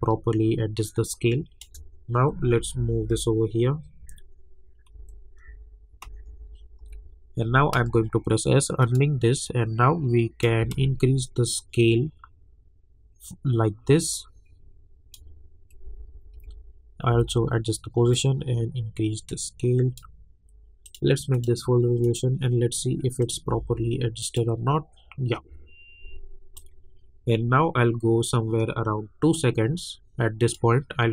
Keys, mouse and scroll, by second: 2.4 Up, 5.1 Up, 5.4 Down, 6.0 Up, 7.7 s, 8.8-10.9 drag, 10.9 ctrl+z, 11.2-15.8 drag, 15.8 Left, 18.1-20.8 drag, 23.5 Left, 24.2 click, 26.5-31.1 drag.